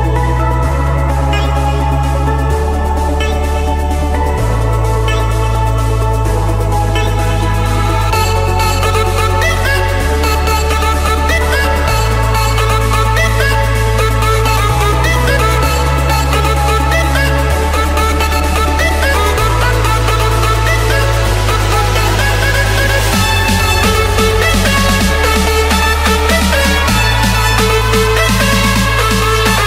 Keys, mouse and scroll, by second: 1.6 Return, 2.6 click, 4.2-4.7 typing, 5.3 Return, 6.5-8.4 scroll, 6.9-8.5 middle drag, 8.8-9.9 drag, 11.1 click, 11.4-12.0 scroll down 5, 12.0-12.5 scroll up 5, 12.7-13.8 scroll, 14.2 click, 16.3 Escape, 17.3 click, 17.8 click, 19.5-20.4 typing, 21.5 Return, 24.3-24.9 typing, 25.8 Return, 26.7 Escape, 28.3 c, 28.9 Return.